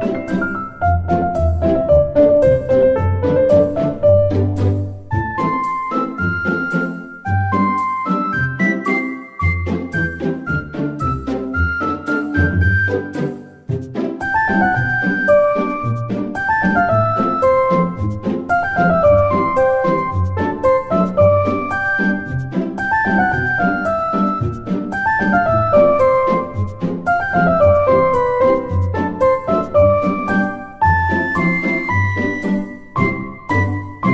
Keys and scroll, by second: 9.5 F2, 10.1 7, 15.0 Tab, 16.6 ctrl+z.